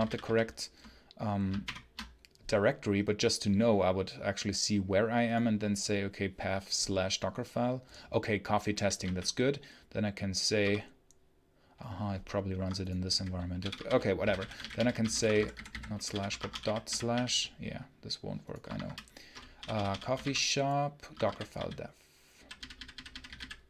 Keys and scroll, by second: 1.5 ctrl+shift+F10, 8.9 a, 10.5 /, 12.4 Escape, 12.7-17.5 typing, 18.6 shift+Escape, 19.4-23.6 typing, 21.0 Escape.